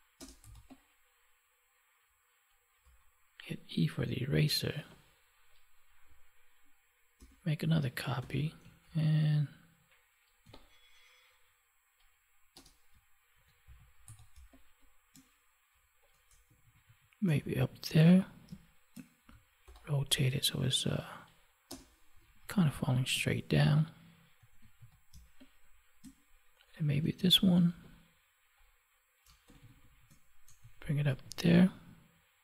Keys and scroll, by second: 7.1 ctrl+j, 13.3 ctrl+1, 14.3 space, 18.4 space, 24.7 ctrl+s, 25.1 space.